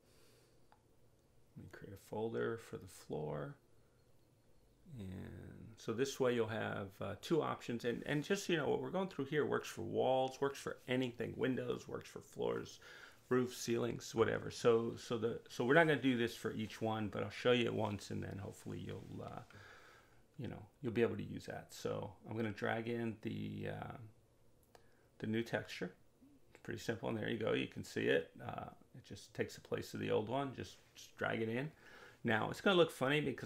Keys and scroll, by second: 0.8-2.6 typing, 2.6 Return.